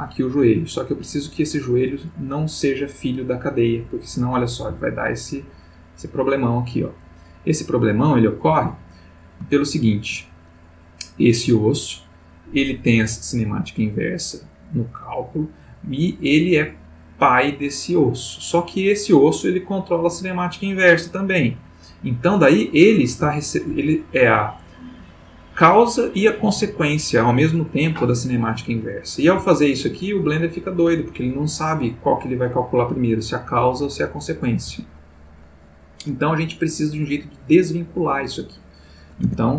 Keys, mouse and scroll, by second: 4.5 g, 8.5 Escape, 9.5-10.2 ctrl+middle drag, 11.1 click, 17.8 click, 23.1 g, 23.7 Escape, 29.3 g, 34.7 Escape, 39.2 Tab.